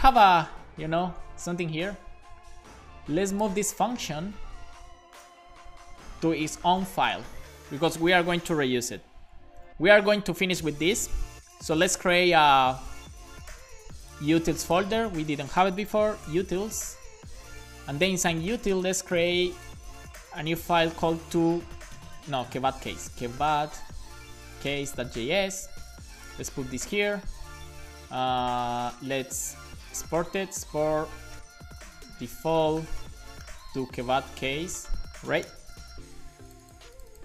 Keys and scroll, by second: 0.7 Up, 3.9 super+Right, 4.1 shift+super+Left, 4.6 shift+Up, 4.9 shift+Left, 5.9 super+x, 6.6 shift+Up, 7.2 BackSpace, 7.6 super+s, 9.0 super+b, 15.8-17.1 typing, 17.7 Return, 21.4-25.8 typing, 26.5 super+v, 27.4 super+Left, 29.0 super+Right, 29.5 Return, 29.6 Return, 30.6-32.5 typing, 34.0-34.9 typing, 35.0 super+s, 35.5 alt+shift+f, 35.8 super+s.